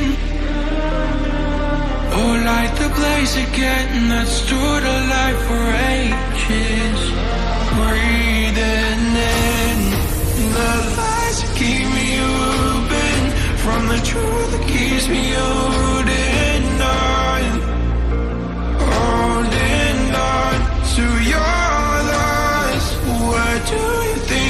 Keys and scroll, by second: 4.4 ctrl+j, 10.8 ctrl+j.